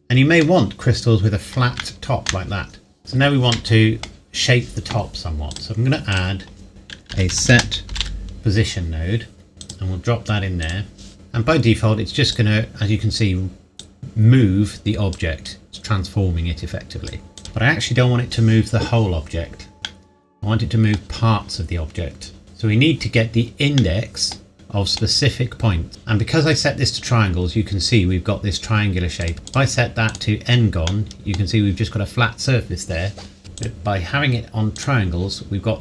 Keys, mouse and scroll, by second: 0.4 scroll up 1, 1.8 shift+middle click, 4.1-5.5 scroll up 1, 5.5 click, 7.1-8.4 typing, 9.6 click, 12.6-13.5 scroll down 1, 13.8 click, 17.8 KP_Enter, 19.8 middle click, 21.0 scroll up 1, 22.4 click, 23.8 middle click, 25.7 scroll up 1, 25.9 middle click, 29.2 click, 30.9 middle click, 33.6 click.